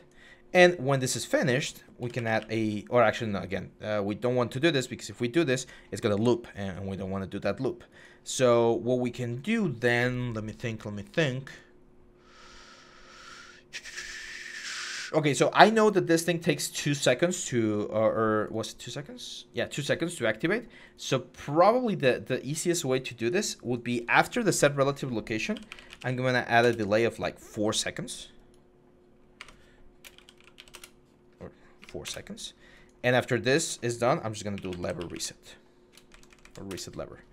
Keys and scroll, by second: 1.8-2.3 typing, 25.4-25.8 typing, 26.4 Return, 28.9-32.1 typing, 30.5 Return, 33.9-34.9 typing, 35.9 Down, 36.1 Down, 36.2 typing, 36.5 Return.